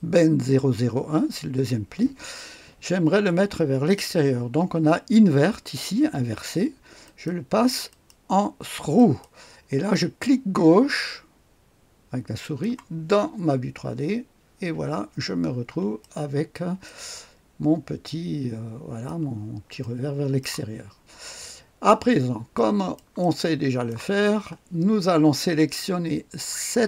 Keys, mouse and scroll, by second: 7.0 click, 7.9 click, 8.9 click, 12.4 click, 14.5-15.0 scroll up 1, 15.0-16.0 scroll down 2, 16.8-19.1 drag, 16.8 right click, 19.8 click, 21.1-22.9 scroll up 2, 22.5 right click, 23.2-24.2 drag, 23.4 middle click, 23.6 right click, 24.4-26.8 scroll up 1.